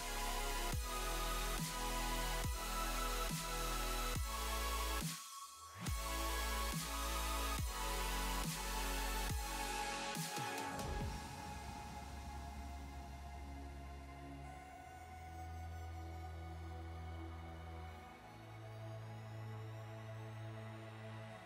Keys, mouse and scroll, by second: 0.5 middle click, 0.9 Tab, 1.7 l, 2.2 Delete, 2.8 middle click, 3.5 Tab, 3.6 middle click, 5.4 click, 6.0 click, 6.4 click, 7.0 click, 7.3 click, 8.4 click, 9.3 click, 9.6 space, 10.6 space, 10.8 click, 11.4 click, 11.7-12.9 scroll down 12, 13.3 click, 13.5-14.0 scroll down 2, 14.0 click, 15.2 click, 15.3 click, 15.5-16.7 scroll up 13, 16.7 click, 17.1 click, 17.4 space, 19.5 space, 19.7 middle click, 20.2 click, 20.7 middle click, 20.9 scroll up 4, 21.3 middle click.